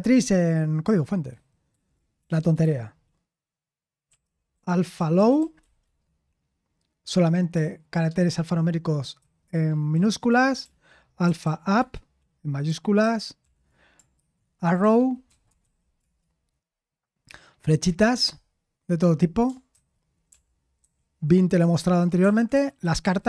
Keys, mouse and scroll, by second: 1.3 ctrl+c, 1.7 ctrl+p, 2.4 BackSpace, 2.6 BackSpace, 4.9-6.3 typing, 9.2 typing, 9.9 Return, 10.3 ctrl+p, 11.2 ctrl+p, 11.4-13.5 typing, 14.8 c, 16.0 ctrl+w, 20.8 ctrl+w, 21.9-23.2 typing.